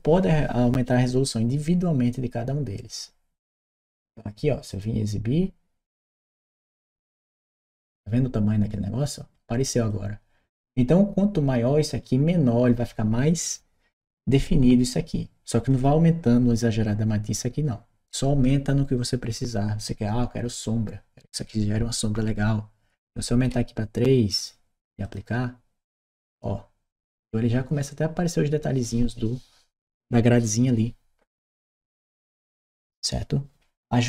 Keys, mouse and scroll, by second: 3.4 click, 4.5 click, 7.0 click, 9.7 click, 15.5 click, 24.2 click, 24.8 click.